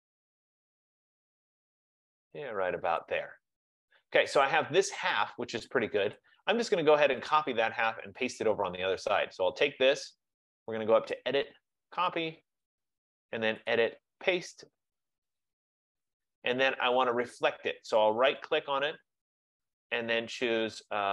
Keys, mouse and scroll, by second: 3.1 click, 6.3 click, 7.4 click, 9.6 click, 11.3 click, 12.7 click, 13.9 click, 15.5 click, 18.7 right click.